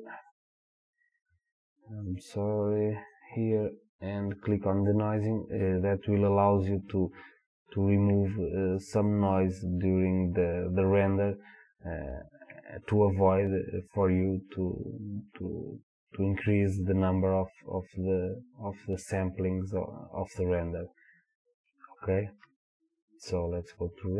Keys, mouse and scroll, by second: 0.3-22.8 drag.